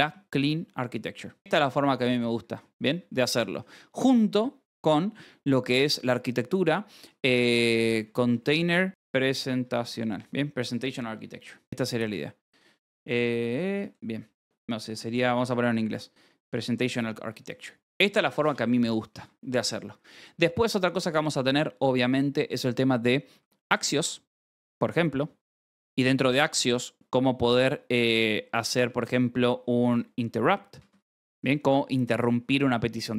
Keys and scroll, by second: 0.0-4.2 typing, 1.4 ctrl+s, 3.1 Escape, 7.0-12.6 typing, 13.4 Escape, 13.7-16.0 typing, 15.5 Escape, 17.1 ctrl+s, 18.2-21.1 typing, 23.1-24.4 typing, 25.1 Return, 25.4 Tab, 25.9 space, 29.5-31.9 typing, 31.0 Escape.